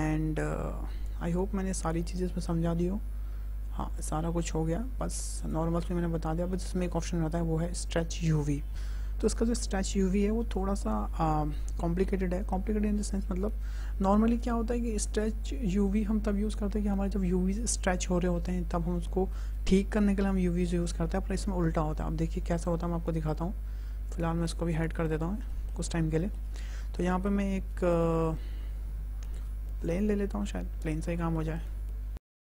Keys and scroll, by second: 27.0 shift+a, 32.3 `.